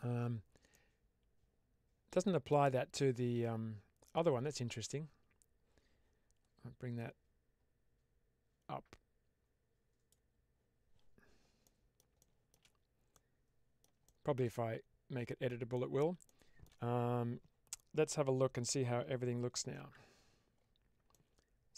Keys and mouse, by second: 0.6-2.4 middle drag, 6.9-10.0 drag, 11.5 middle drag, 12.1-12.4 shift+middle drag, 13.0-13.7 middle drag, 13.9-14.3 shift+middle drag, 15.6 middle click, 16.3 shift+middle click, 21.0-21.7 middle drag.